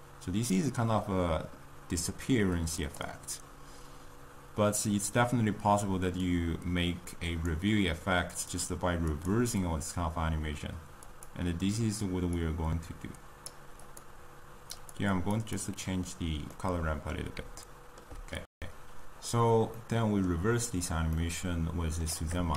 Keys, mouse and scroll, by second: 2.9 click, 3.5-6.0 scroll down 1, 6.4-9.2 drag, 12.5 click, 13.8 click, 15.7-16.4 drag, 16.4 scroll up 1, 16.7-18.4 middle drag, 18.4 n.